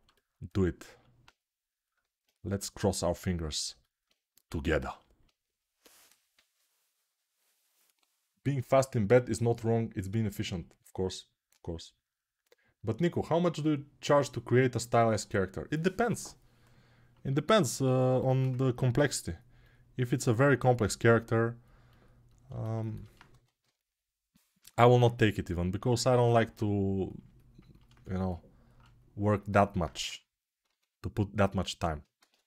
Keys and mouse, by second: 2.3 g, 7.1-27.6 drag, 23.1 1, 32.1-32.4 drag, 32.3 g.